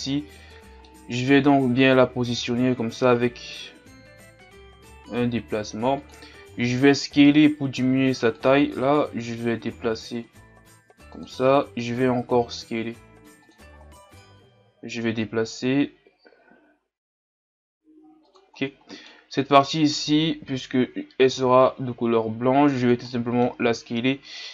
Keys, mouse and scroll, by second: 0.2-2.4 scroll up 1, 2.4 scroll up 1, 2.5 g, 6.6 s, 8.8 g, 12.1 s, 14.5 g, 19.5 right click, 20.4 l, 21.3 s, 23.1 middle click, 23.6 g.